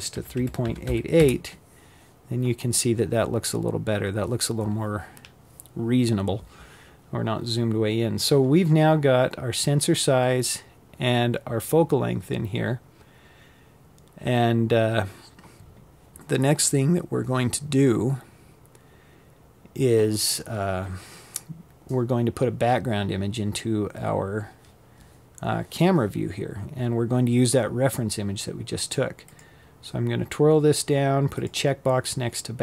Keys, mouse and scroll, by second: 26.9 click, 29.0 click, 30.5 click, 32.5 click.